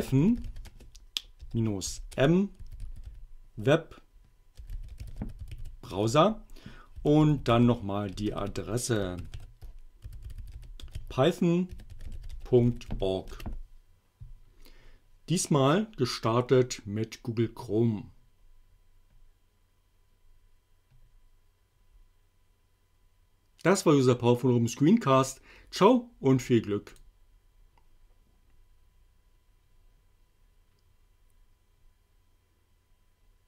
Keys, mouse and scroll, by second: 0.0-13.4 typing, 26.9 click.